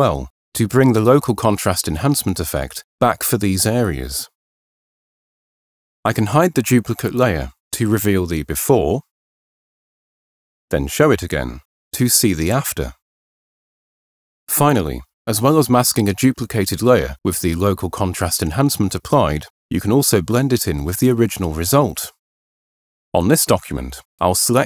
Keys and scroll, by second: 0.7 [, 1.3 [, 2.4 ], 5.8 h.